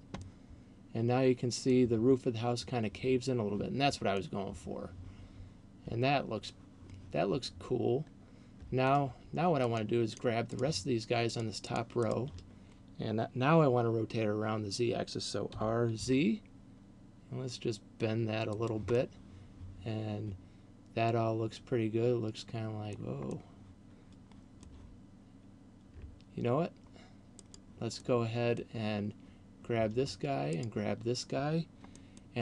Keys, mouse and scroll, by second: 0.2 middle click, 4.4 middle click, 9.9 shift+right click, 10.2 shift+right click, 11.4 shift+right click, 11.9 shift+right click, 12.2 shift+right click, 15.7 r, 18.7 click, 18.7 middle click, 23.4 middle click, 27.4 right click, 27.9 middle click, 30.7 shift+right click, 31.9 middle click.